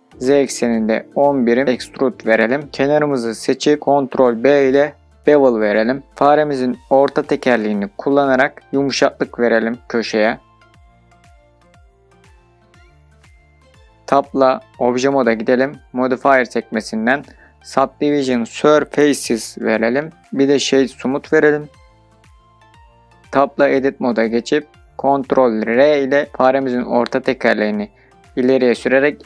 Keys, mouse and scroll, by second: 2.3 KP_1, 2.6 KP_0, 2.8 click, 3.6-4.6 scroll down 1, 5.4 ctrl+b, 8.3 scroll up 2, 10.7-11.3 scroll up 4, 12.9-13.3 scroll up 4, 13.3 click, 13.8 middle click, 14.0 scroll down 3, 14.3 Tab, 16.2-19.2 drag, 21.0 right click, 23.0 Tab, 24.5 middle click, 28.2 ctrl+r.